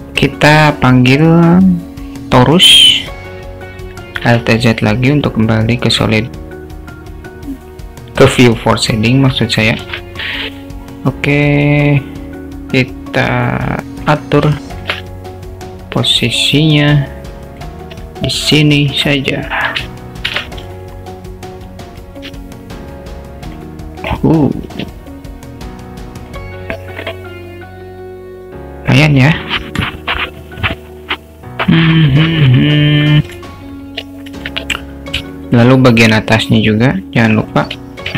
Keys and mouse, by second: 4.4 alt+z, 9.4 ctrl+3, 10.4 s, 14.6 alt+shift+middle drag, 15.6-17.7 drag, 17.9 s, 20.3 shift+d, 22.3 s, 23.9 click, 27.0 click, 33.4 alt+z, 34.1 alt+z, 35.4 alt+shift+middle drag, 36.0 click, 37.4 click.